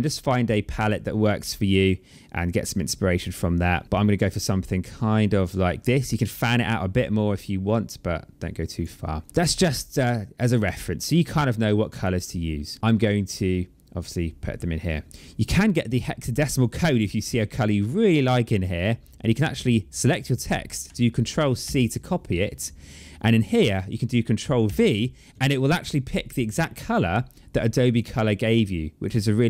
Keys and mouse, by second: 5.8 click, 9.9 click, 11.7 click, 13.0 click, 15.8 click, 16.9 click, 19.2 click, 21.4 ctrl+c, 22.3 click, 24.4 ctrl+v, 27.7 click, 28.8 click.